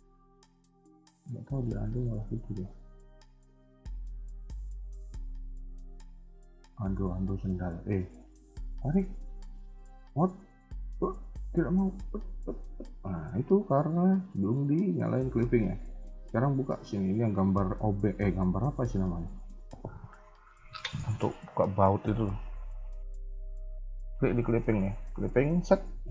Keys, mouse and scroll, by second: 0.2-1.0 scroll up 4, 0.6 shift+middle click, 1.4 alt+click, 1.9 shift+middle click, 2.6-2.9 scroll down 2, 2.9 shift+middle click, 7.6 e, 14.3-15.9 scroll down 1, 15.9 scroll down 4, 17.6-19.3 scroll up 3, 23.0-25.2 scroll down 2, 25.2 click, 25.2-26.1 scroll down 1.